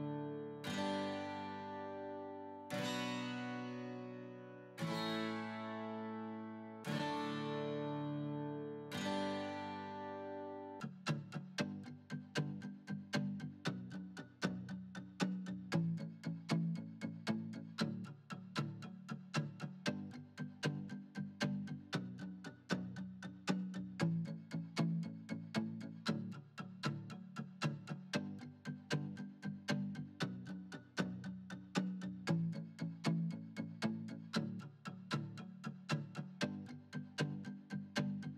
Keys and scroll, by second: 10.7 s.